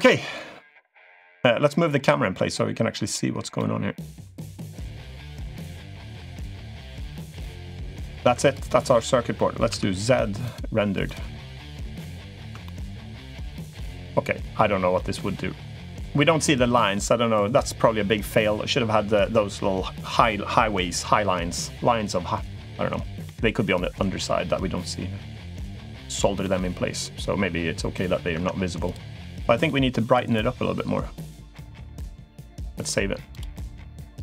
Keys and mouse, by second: 2.9 click, 3.3 middle click, 5.1 click, 5.6-7.2 drag, 8.0 Tab, 8.2 click, 8.5 middle click, 9.5 z, 10.9 click, 11.9 middle click, 12.4 shift+middle click, 12.8-14.3 middle drag, 14.7 middle click, 16.0 middle click, 23.0-25.7 middle drag, 25.9 middle click, 28.1 Tab, 29.4 middle click, 31.2 middle click, 33.2 click.